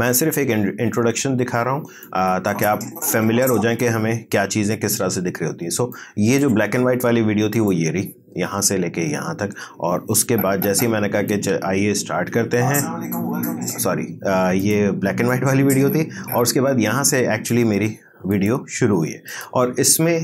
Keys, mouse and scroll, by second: 2.0-7.5 drag, 10.2-12.1 drag, 12.1 space, 14.6-18.3 drag.